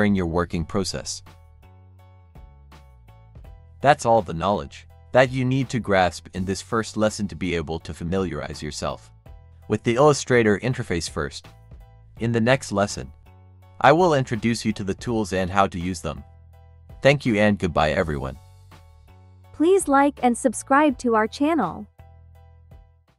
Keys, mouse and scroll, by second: 0.2 alt+scroll up 1, 0.7-1.2 alt+scroll down 1, 1.3 space, 1.4 click, 1.9 space, 3.6 alt+scroll up 1, 4.3-5.8 alt+scroll down 1.